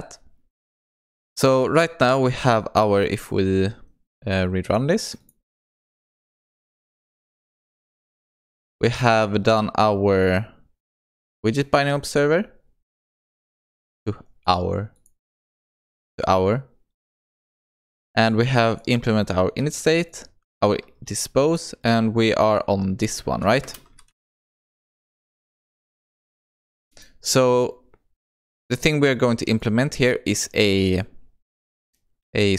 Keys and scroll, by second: 4.7 shift+F10.